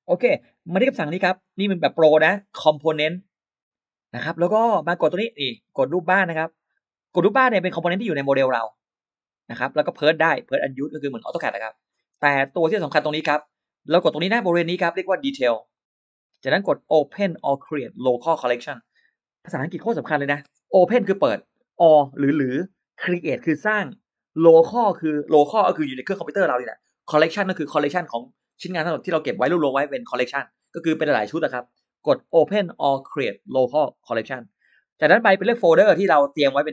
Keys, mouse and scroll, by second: 0.0 middle click, 0.0-0.3 scroll up 1, 2.8 click, 4.2 click, 6.9 click, 8.1-8.4 scroll down 1, 9.5 click, 10.7 click, 12.1 click, 15.6 click, 34.1 click, 36.4 click.